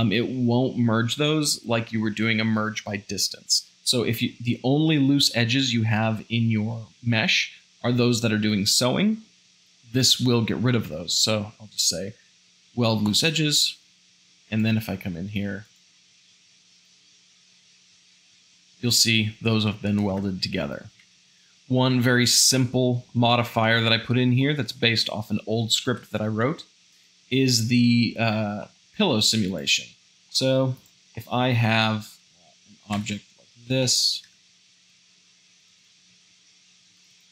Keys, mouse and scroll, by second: 13.8 Tab, 17.7 g, 20.1 Tab, 21.0 shift+z, 21.1 shift+middle click, 22.5-23.1 shift+middle drag, 23.3-25.3 shift+middle drag, 25.9 shift+a, 28.6 s, 30.2 s, 30.3 middle click, 32.3 s, 33.0 Tab, 33.9 shift+middle click, 34.3 Tab, 34.7 ctrl+r, 36.1 ctrl+r, 36.4-37.3 middle drag.